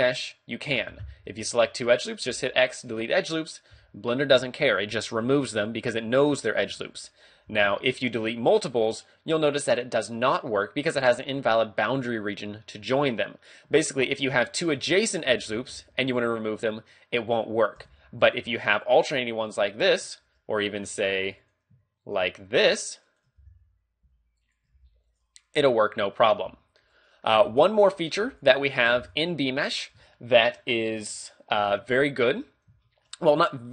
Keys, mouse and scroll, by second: 2.3 x, 6.3 ctrl+z, 7.1 alt+shift+right click, 7.5 x, 13.7 a, 14.5 alt+right click, 15.0 alt+shift+right click, 15.3 x, 17.9 a, 18.2 alt+right click, 18.8 alt+shift+right click, 20.4 ctrl+r, 21.0 click, 21.4 alt+right click, 22.1 alt+shift+right click, 22.8 alt+right click, 23.0 shift+right click, 23.4 x, 24.4 alt+shift+right click, 24.8 x, 27.0 alt+right click, 27.4 x, 28.0 alt+right click, 28.2 x, 28.8 alt+right click, 29.0 x, 30.1 shift+middle click, 31.9 shift+middle click, 32.5-32.9 scroll down 2, 32.9 shift+middle click, 33.2 scroll up 1.